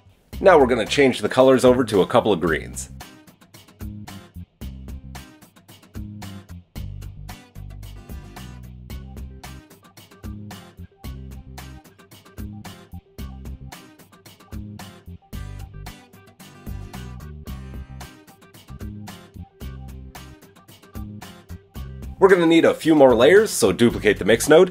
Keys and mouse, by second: 0.4-12.0 middle drag, 12.0 click, 12.7-20.9 middle drag, 20.9-22.9 drag, 22.9 middle click, 23.4 shift+d.